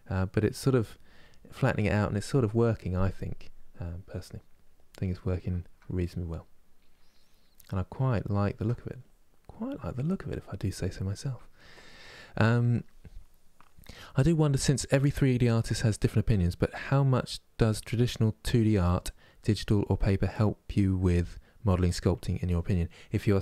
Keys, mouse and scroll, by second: 0.2 click, 0.5 m, 0.9-8.7 middle drag, 8.7 click, 9.6 middle click, 10.0-23.3 drag, 23.3-23.4 middle drag.